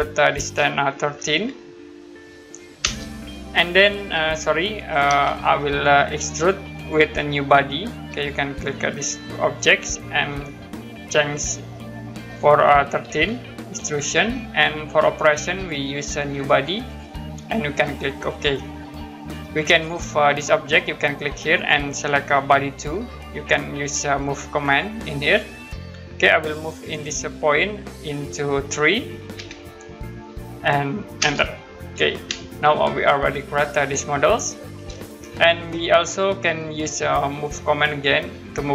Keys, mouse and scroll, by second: 0.9 1, 2.8 Return, 5.0 z, 6.8 click, 13.1-14.0 typing, 15.5 click, 18.3 click, 21.5 click, 25.2 click, 26.9 click, 29.3 3, 31.2 Return, 32.5 middle click, 35.2-35.5 scroll down 1, 36.9 middle click, 37.8-38.7 scroll down 1.